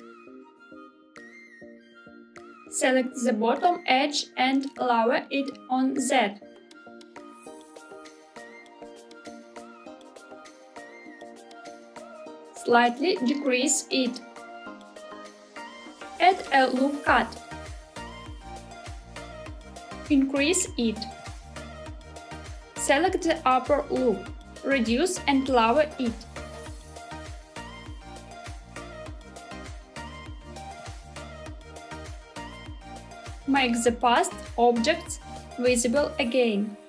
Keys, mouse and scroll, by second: 2.0 click, 2.3 middle click, 2.4 click, 2.7 click, 3.1-4.2 middle drag, 4.6-6.4 middle drag, 7.1 g, 7.7 z, 11.1 click, 12.5 s, 14.9 click, 15.9 ctrl+r, 17.7 click, 19.4 s, 22.2 click, 23.2 click, 23.4 click, 24.7 s, 27.8 click, 28.9 g, 28.9 z, 31.5 click, 32.1 Tab, 32.9 middle click, 34.3 click, 35.0 click, 36.4-36.8 scroll down 2.